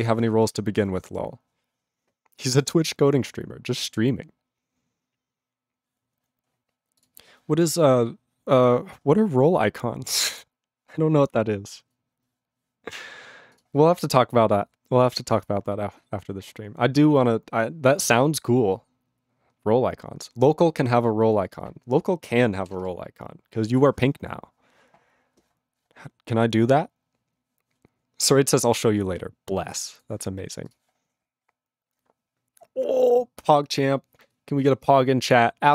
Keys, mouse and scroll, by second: 13.6 click, 30.7 click.